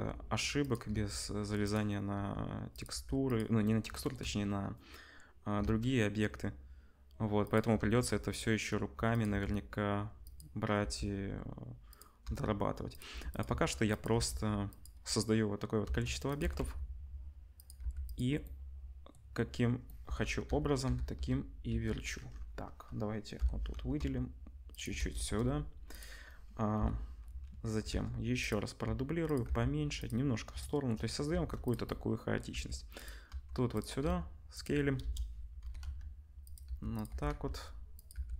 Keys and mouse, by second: 0.9 shift+d, 2.1 r, 2.9 g, 5.6 shift+d, 7.7 shift+d, 8.7 r, 9.2 g, 10.8 g, 12.2 r, 13.1 g, 13.4 s, 14.1 g, 16.0 shift+d, 16.4 r, 17.8-25.1 middle drag, 17.8 g, 20.4 l, 20.8 l, 21.1 l, 21.6 l, 23.3 l, 23.9 r, 25.1 KP_0, 25.9 click, 26.7 l, 27.8 shift+d, 28.8 s, 29.4 g, 31.3 shift+d, 32.5-35.6 typing, 36.6 g, 37.0 r, 38.1 g.